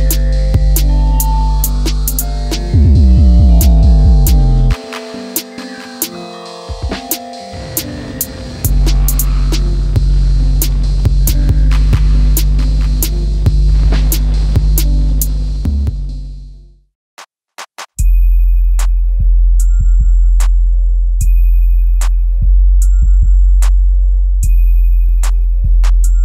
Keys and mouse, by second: 0.1 right click, 0.6 middle click, 1.4 KP_1, 2.1 KP_7, 5.1 click, 7.3-10.0 drag, 10.4 middle click, 13.4 ctrl+KP_Add, 14.8 Delete, 16.2 middle click, 17.8 click, 18.5 click, 18.8 click, 19.4 click, 21.0 click, 21.4-23.0 middle drag, 25.4 click, 26.0 middle click.